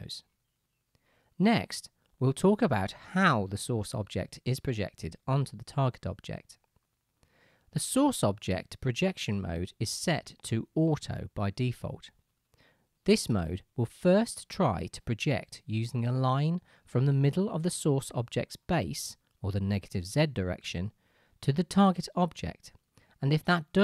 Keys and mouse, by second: 0.7-23.8 drag.